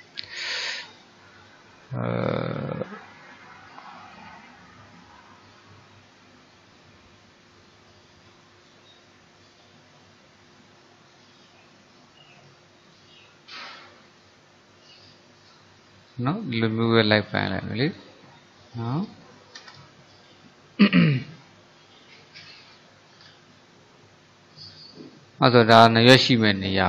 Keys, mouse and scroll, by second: 5.2-8.3 drag, 21.2-22.3 drag, 22.3 middle click, 23.3-23.7 scroll down 4, 23.7-26.1 middle drag, 26.1 scroll down 1, 26.3-26.6 scroll up 1, 26.6-26.8 middle drag.